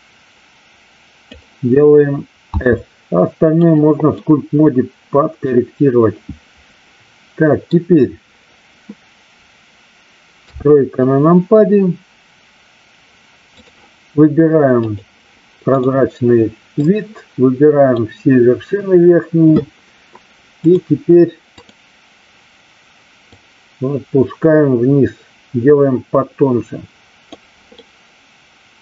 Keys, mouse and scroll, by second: 2.5 s, 3.6 click, 4.1-7.6 middle drag, 10.3 KP_3, 13.6 click, 14.8 click, 15.7 click, 16.9-18.1 drag, 20.6 click, 21.6 click, 23.3-27.2 drag, 27.7-28.8 middle drag.